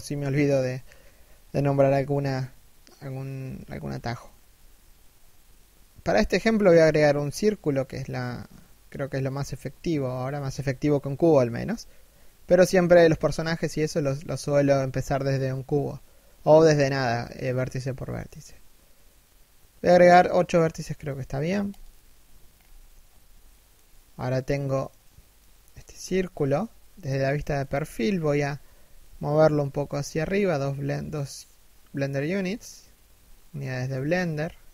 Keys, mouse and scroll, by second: 22.0-23.0 scroll up 1, 23.0 shift+middle click, 23.4 middle click, 25.5 1, 27.0-27.4 scroll down 1, 27.4 shift+middle click, 28.3 g, 31.9-32.6 scroll up 1, 32.9 shift+middle click, 34.6 e.